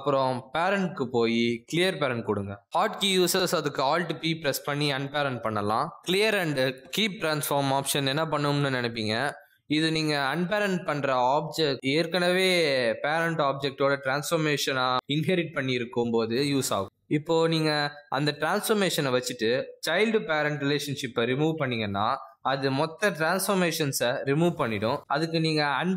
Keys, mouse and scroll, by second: 5.6 alt+p, 15.2 ctrl+z, 16.0 click, 16.3 g, 19.6 g, 20.1 r, 20.6 r, 21.8-24.9 typing, 25.3 right click.